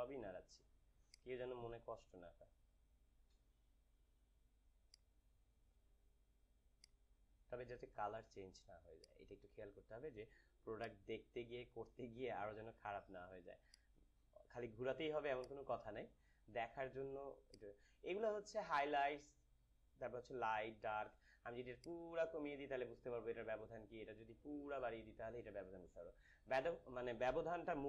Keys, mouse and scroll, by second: 21.7-27.8 drag.